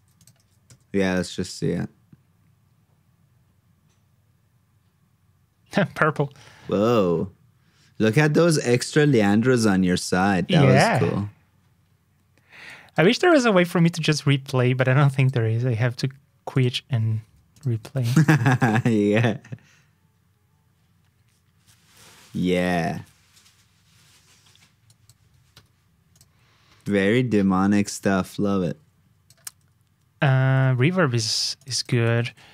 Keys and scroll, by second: 0.3 super+v, 17.9 super+c, 18.3 super+v, 29.8 alt+shift+Down, 30.4 super+Tab, 32.0 super+c, 32.2 super+Tab.